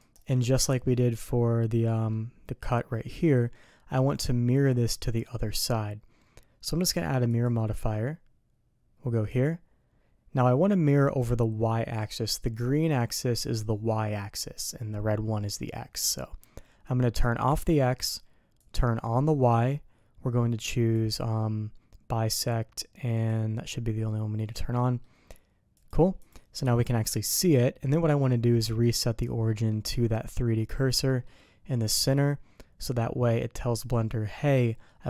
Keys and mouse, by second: 0.9-1.2 drag, 1.7-2.1 drag, 3.5-4.0 drag, 17.5 click, 18.6 click, 20.9 click, 22.3 click, 23.1 click, 24.4 middle click, 25.7 click, 26.2 click, 27.3 middle click, 29.4 middle drag, 31.0 middle click, 34.6 middle click.